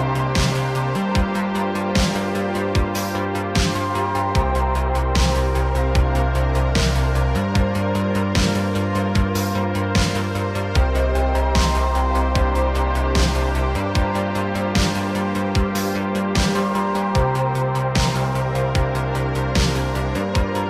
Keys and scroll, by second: 0.2 x, 2.1 x, 4.2 x, 6.1 x, 7.3 a, 7.9 KP_Decimal, 11.2 KP_Decimal, 13.3 n, 15.7 space, 17.6 s, 19.6 space.